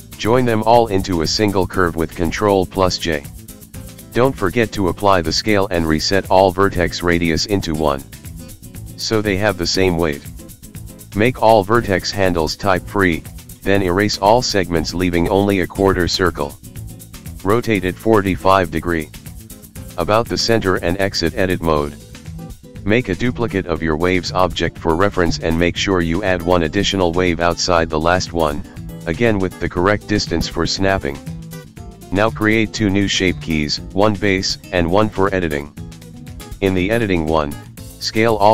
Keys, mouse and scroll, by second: 0.1 shift+d, 1.1 s, 1.8-2.7 scroll down 3, 2.7 click, 2.7-3.1 scroll down 1, 3.8 ctrl+j, 5.9 Tab, 6.4 right click, 7.4 click, 8.6 x, 9.7 click, 10.2 x, 10.9 click, 11.3 x, 12.0 click, 12.9 Tab, 13.5 r, 14.5 click, 15.2 click, 16.1 click, 16.2 click, 19.1 shift+d, 20.7 click, 22.3 click, 22.7 click, 23.1-23.4 scroll down 10, 23.5 click, 24.8 click, 25.8 click, 26.8 click, 28.0 click, 29.9 click, 31.2 scroll down 1, 32.0 click, 32.0 scroll down 3, 32.2 click, 33.2 Tab, 34.2 click, 35.0 click, 36.1 shift+click, 36.4 shift+click, 36.8 shift+click, 37.5 s.